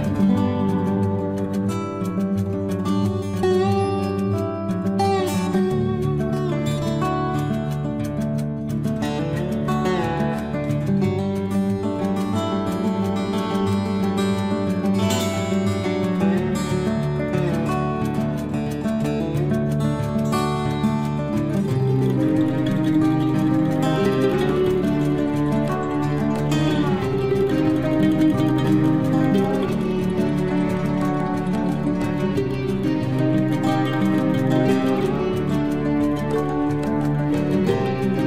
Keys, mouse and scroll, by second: 0.2 space, 3.0-4.3 drag, 4.3 Delete, 5.9 scroll down 1, 6.8 click, 7.9 Delete, 8.4 scroll up 1, 9.2 click, 10.3 Delete, 14.0 t, 15.2-15.9 scroll up 1, 16.8 click, 18.3-19.5 typing, 20.7 click, 21.8 typing, 22.0 Return, 26.6 scroll up 1, 27.8 click, 27.8 click, 29.5-31.3 typing, 32.0 click, 33.0 9, 33.2 Return, 37.9 scroll up 1.